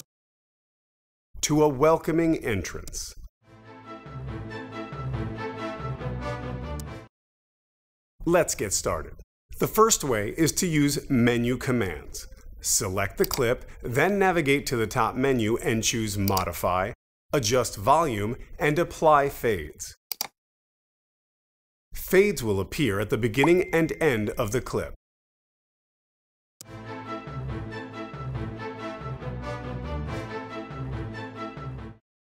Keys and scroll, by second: 2.8 space, 6.7 space, 26.5 space.